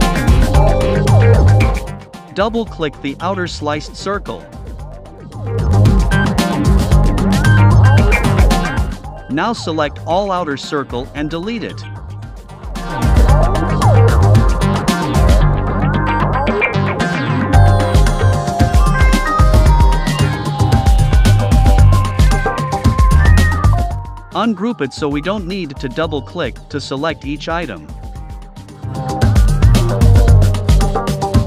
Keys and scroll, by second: 9.3 BackSpace.